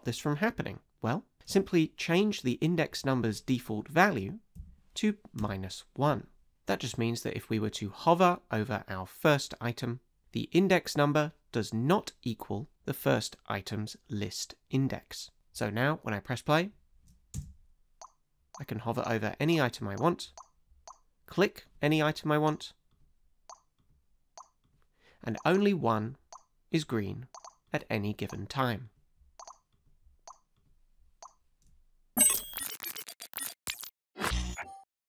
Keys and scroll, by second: 4.5 Down, 5.3 Return, 17.3 space.